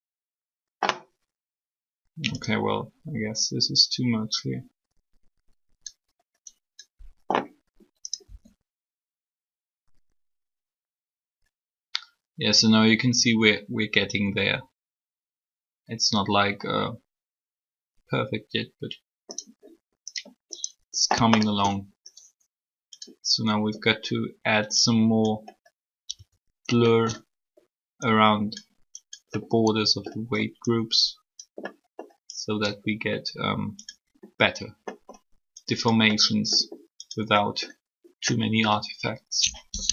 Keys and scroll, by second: 8.2 r.